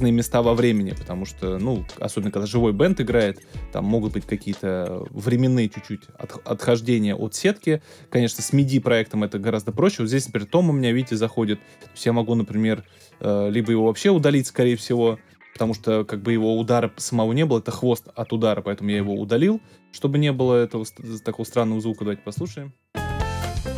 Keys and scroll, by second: 15.6 BackSpace, 22.4 space.